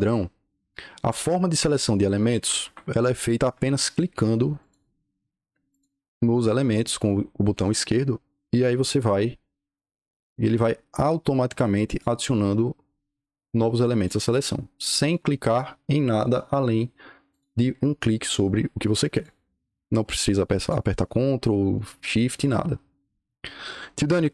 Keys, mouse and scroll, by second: 2.3 Escape, 2.5 Escape, 4.5 click, 5.6 click, 6.6 click, 7.4 click, 8.6 click, 8.9-9.2 scroll up 2, 9.6 click, 10.8 click, 11.8 click, 13.0 click, 13.9 click, 14.9 click, 16.1 click, 17.2 click, 19.0 click, 20.5 click, 21.6 click, 22.2 click.